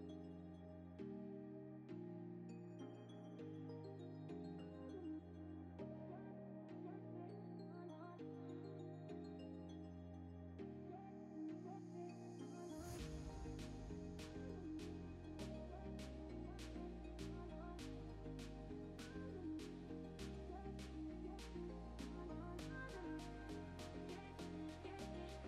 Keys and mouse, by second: 0.0-1.1 typing, 0.0 Tab, 0.1 Tab, 2.1 Tab, 2.4 shift+click, 2.7 ctrl+p, 3.0 click, 3.4 s, 4.0 s, 4.3 middle click, 4.8 g, 5.6 click, 5.7 shift+click, 5.9 g, 6.6 click, 6.7 g, 7.2 click, 7.5 Tab, 7.7 shift+s, 7.8 Tab, 9.5 shift+a, 10.9-11.3 drag, 11.9-13.9 shift+drag, 14.2 click, 15.3 shift+click, 16.4-17.5 shift+drag, 18.1-18.4 drag, 20.2 click, 20.6 KP_0, 21.5 middle click, 22.2 click, 23.4-24.1 middle drag, 24.3 click, 24.6 KP_0.